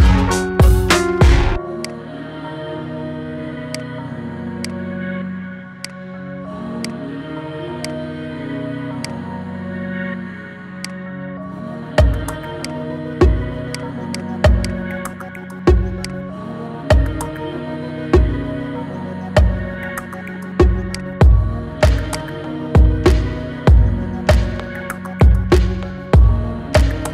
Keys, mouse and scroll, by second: 3.6-4.5 drag, 8.9 click, 10.0-10.7 scroll up 1, 10.7 click, 12.4 click, 16.2 click, 17.5-18.1 middle drag, 18.1-18.6 scroll up 5, 18.6-20.8 shift+middle drag, 22.2-23.1 drag, 23.1-24.0 middle drag, 24.0-24.4 scroll down 3, 24.4-25.0 middle drag, 25.0-25.9 scroll up 4, 25.9-26.6 scroll up 1, 26.6 click.